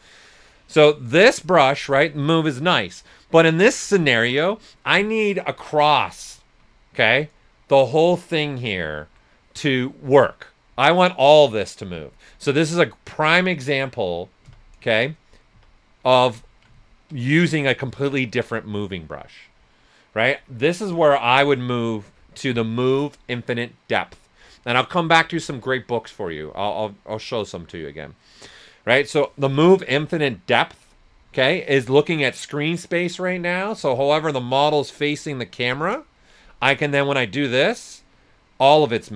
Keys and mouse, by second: 1.3-6.9 drag, 6.9 ctrl+z, 7.2-8.8 right drag, 12.0 right click, 12.3 Caps_Lock, 13.0 right click, 13.1 Caps_Lock, 14.8 right click, 15.5 Caps_Lock, 16.1 ctrl+right click, 20.8-21.2 typing, 30.8 click, 33.7 s, 33.8-36.6 drag, 36.9-39.1 drag.